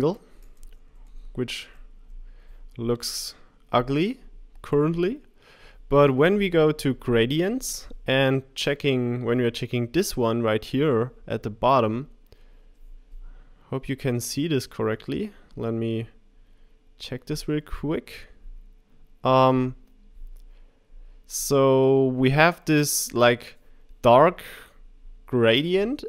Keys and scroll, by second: 1.6 Left, 2.0 Right.